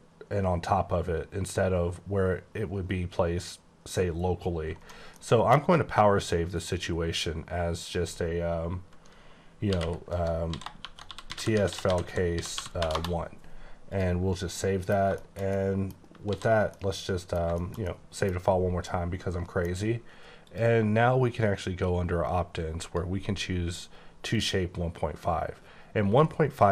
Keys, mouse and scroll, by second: 0.4-0.7 ctrl+scroll down 2, 1.1-2.3 ctrl+scroll up 3, 2.3-3.1 ctrl+scroll up 2, 3.1-3.5 ctrl+scroll up 2, 4.1 ctrl+scroll up 1, 4.8 ctrl+right click, 5.2 middle click, 6.6 click, 7.8 click, 9.7-12.8 typing, 12.9 Return, 13.9 click, 14.5 middle click, 15.2 middle click, 15.5 double middle click, 16.3 s, 16.7 middle click, 17.6 shift+middle click, 18.8 middle click, 20.4 click, 22.8 click, 24.3 click.